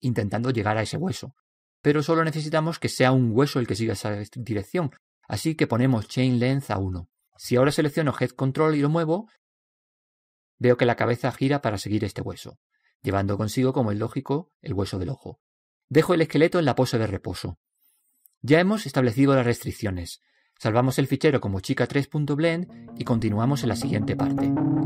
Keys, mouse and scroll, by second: 0.8 middle click, 3.7 click, 9.4-11.9 right drag, 10.4 g, 17.7 a, 17.9 a, 19.3 alt+r, 19.6 alt+g, 19.9 alt+s, 21.9-23.1 middle drag, 23.2 middle click, 23.4-24.8 drag, 23.6 middle drag.